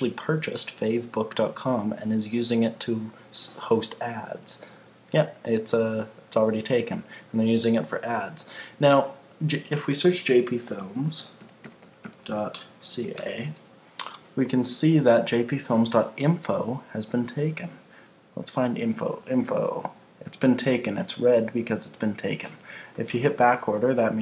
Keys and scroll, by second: 13.1 Return.